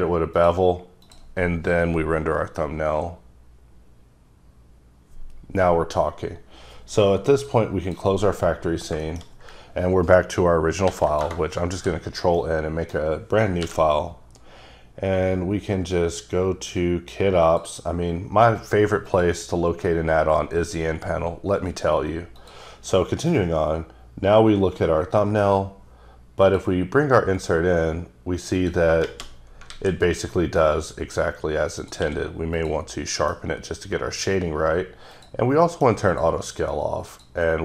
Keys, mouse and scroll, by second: 1.1 click, 7.5 click, 8.6-8.9 scroll down 3, 9.1 shift+middle click, 10.9 ctrl+n, 11.2 Return, 11.7 d, 12.4 middle click, 13.0 scroll up 2, 13.7 n, 17.5 click, 19.1 click, 21.7 click, 22.4 click, 25.2 middle click, 25.5 scroll up 2, 26.5 click, 27.2-28.4 scroll down 4, 28.6 click, 29.7 alt+a, 30.1 scroll down 2, 30.4 middle click, 30.7 scroll up 1, 31.8 click, 32.1 q, 32.6 click, 33.1 middle click, 35.2 click, 35.7 middle click, 36.1 click, 37.1 click.